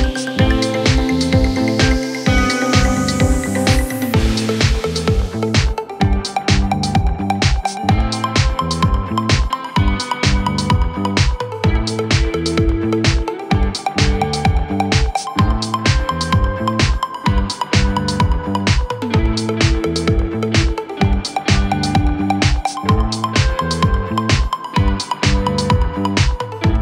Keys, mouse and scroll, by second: 11.9 Tab, 12.8 a, 13.7 g, 13.7 z, 18.0 Tab, 19.8 space.